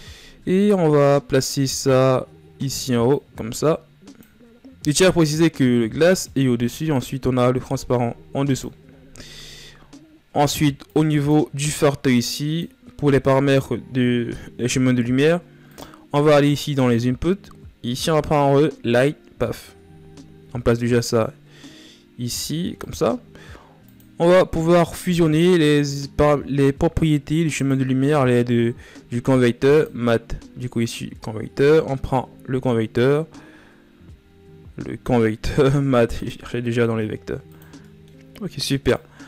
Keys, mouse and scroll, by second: 19.1 click, 35.8 click.